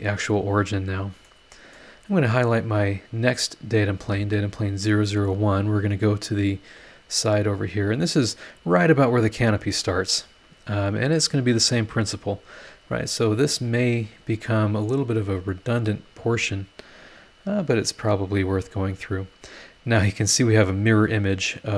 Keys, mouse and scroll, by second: 0.6 scroll down 2, 1.2 middle click, 2.3 scroll down 2, 2.9 click, 4.0 space, 4.8 scroll up 1, 6.3 scroll down 1, 6.4 click, 7.3 scroll up 1, 11.2 middle click, 11.2 click, 11.2 right click, 12.5 click, 13.4 click, 14.5 click, 16.0 click, 16.7 scroll down 1, 17.3-17.6 scroll up 1, 17.8 scroll up 1, 18.8 scroll down 1, 19.3 scroll up 1.